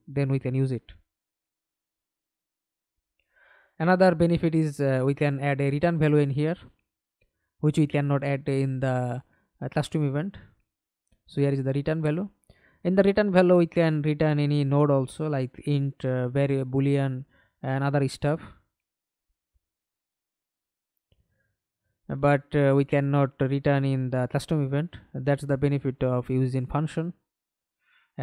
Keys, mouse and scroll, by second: 1.4 right click, 2.6 right click, 3.7 right click, 9.0-10.9 typing, 11.2 Return, 13.2 right click, 17.6 right click, 22.4 right click, 23.8 right click, 24.7 right click.